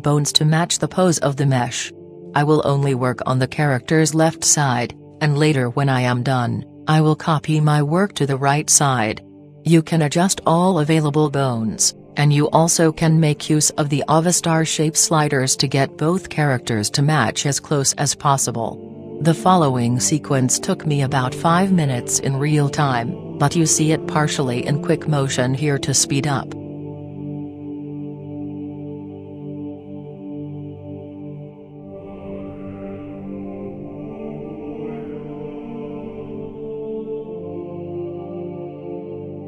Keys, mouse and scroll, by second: 1.4-2.9 drag, 5.3-6.9 right drag, 6.7 r, 8.0-9.8 drag, 8.8-10.6 right drag, 9.2 r, 11.4-13.0 drag, 11.9 right click, 12.3 r, 13.0 right click, 14.3-15.8 drag, 15.2-16.6 right drag, 15.4 r, 17.6-19.3 drag, 18.6-20.3 right drag, 19.2 r, 21.8-23.2 drag, 24.7 click, 26.4-27.4 drag, 33.4 right click, 34.8 right click, 35.2 r, 35.9 click, 37.0 KP_3, 37.6-38.7 middle drag, 37.6 scroll up 1, 38.9 right click.